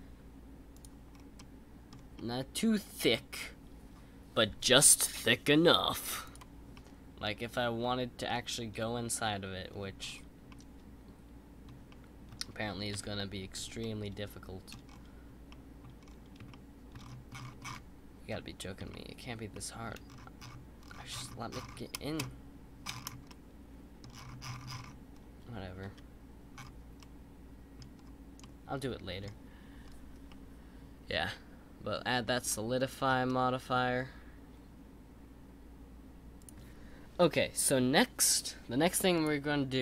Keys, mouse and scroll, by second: 0.7 click, 1.1 scroll up 3, 1.3-1.9 middle drag, 1.9 scroll up 2, 2.1-3.2 middle drag, 3.2-5.3 scroll up 1, 6.2 click, 6.7-10.0 middle drag, 10.0-10.5 scroll down 2, 10.5-12.9 middle drag, 12.9 KP_1, 13.8-14.8 shift+middle drag, 14.8-15.5 scroll up 5, 15.5 middle click, 16.0-16.5 scroll up 3, 16.5 shift+middle click, 16.9-18.3 scroll up 31, 18.3-18.9 scroll down 1, 18.9-20.0 shift+middle drag, 20.0-22.1 scroll down 30, 22.1-23.2 scroll up 171, 23.2-24.0 middle drag, 24.0-25.1 scroll down 40, 25.8 KP_Decimal, 26.5-27.0 scroll up 2, 27.0-27.9 middle drag, 27.9-28.4 scroll down 2, 28.4-29.8 middle drag, 29.8-30.3 scroll down 2, 30.3-32.8 middle drag, 32.8-33.2 scroll down 4, 33.2-36.4 middle drag.